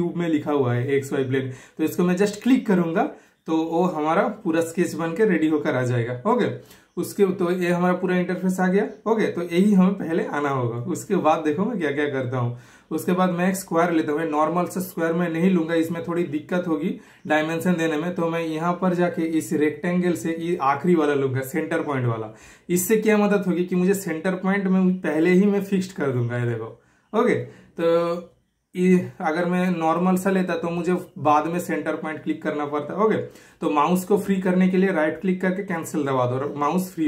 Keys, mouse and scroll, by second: 0.8-3.8 middle drag, 3.8 super+click, 18.3 super+click, 18.4 typing, 21.9 super+click, 25.6 super+click, 28.3 super+click, 30.7 super+right click, 31.9 super+click.